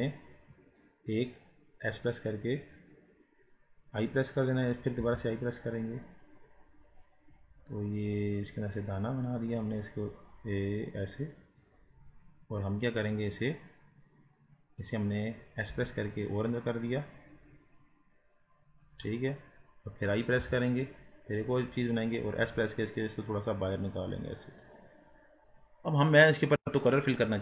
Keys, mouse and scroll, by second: 0.1-12.1 middle drag, 12.1 scroll up 2, 12.9-15.8 middle drag, 15.8 s, 20.5 i, 22.6 s, 25.2-25.9 scroll down 6, 26.3-27.4 middle drag.